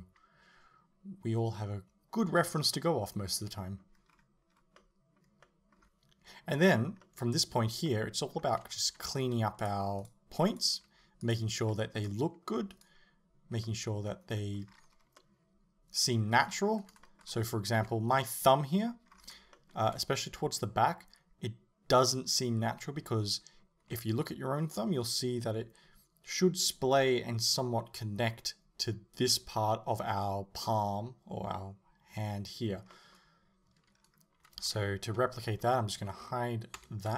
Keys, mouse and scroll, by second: 4.1-4.5 scroll up 2, 4.5 scroll down 2, 8.8 right click, 9.1 g, 10.0 right click, 10.5 right click, 10.9 g, 11.4 click, 11.7-12.8 middle drag, 12.8 right click, 13.7-35.7 middle drag, 14.7-15.2 scroll down 2, 16.4-17.1 scroll up 1, 17.8 KP_7, 19.2-19.6 scroll up 1, 34.0-34.7 scroll up 1, 34.7 a, 35.7 l, 36.8 h.